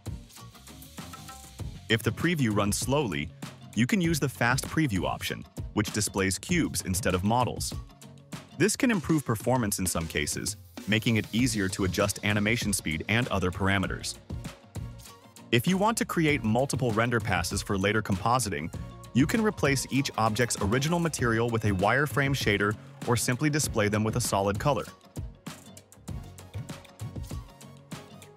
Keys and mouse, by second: 4.0 click, 5.8 click, 15.6 click, 20.2-21.5 drag, 22.2 click, 24.4-25.3 drag, 27.0 click.